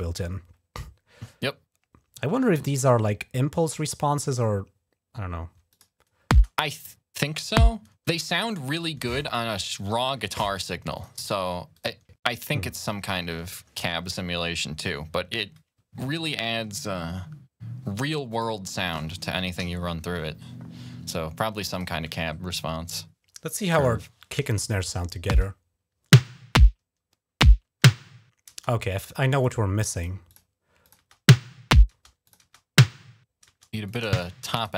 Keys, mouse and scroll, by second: 5.5 click, 6.2 space, 8.0 click, 10.7 click, 11.5 click, 18.1 click, 18.6 click, 19.4 ctrl+s, 21.5 click, 25.2 space, 28.3 space, 29.1 click, 29.7 click, 30.1 click, 30.6 click, 30.8-32.2 typing, 32.0 click, 33.2 space, 33.6 click, 34.4 click.